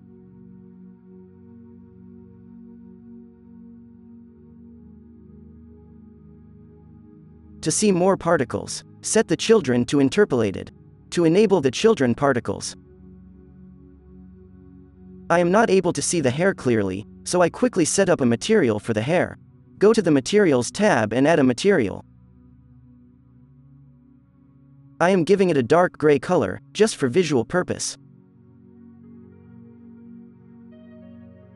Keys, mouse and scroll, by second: 0.3 f, 0.7 f, 1.9-3.6 drag, 3.6-7.5 middle drag, 8.2-9.0 middle drag, 9.0 click, 9.5-11.2 middle drag, 13.2-19.9 drag, 22.0 click, 24.3 n, 25.1 alt+a, 29.5-29.9 drag, 29.9 alt+a, 30.4 right click.